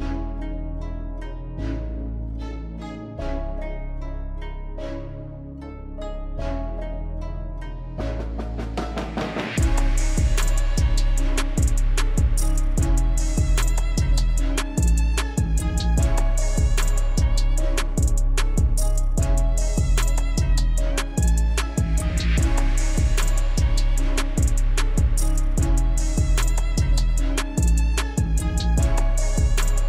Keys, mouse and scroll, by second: 1.4 click, 9.8 click, 12.2-14.2 scroll down 1, 16.4-17.7 scroll up 1, 17.7 click, 22.8-24.1 alt+scroll down 1, 25.9-27.0 scroll down 1, 27.4 click.